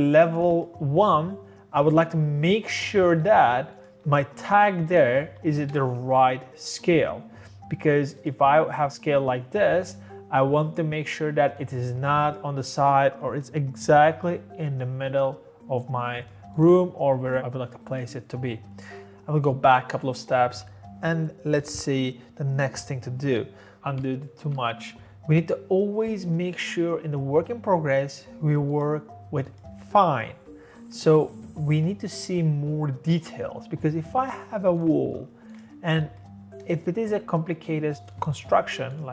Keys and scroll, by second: 5.3 Escape, 5.4 Escape, 23.8 ctrl+y, 33.8-34.6 typing, 35.9 Escape.